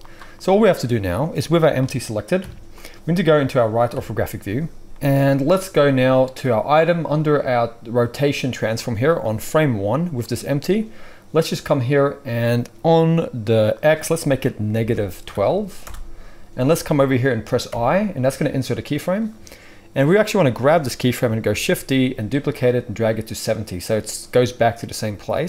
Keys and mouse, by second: 0.6-9.2 middle drag, 3.9 KP_3, 9.2-23.6 drag, 17.7 i, 21.4 shift+d, 23.6-25.4 middle drag.